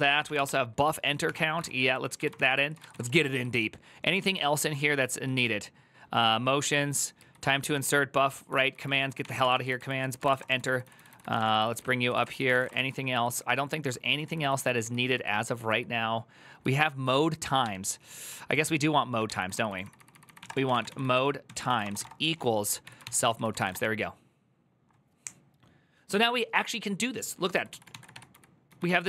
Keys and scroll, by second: 0.0-3.2 typing, 1.0 Tab, 2.1 ctrl+c, 3.3 ctrl+u, 4.3 ctrl+u, 7.5 ctrl+d, 8.1-12.9 typing, 9.7 ctrl+c, 12.9 ctrl+u, 13.9-14.6 typing, 16.8-23.9 typing, 18.1 ctrl+u, 27.9-29.0 typing.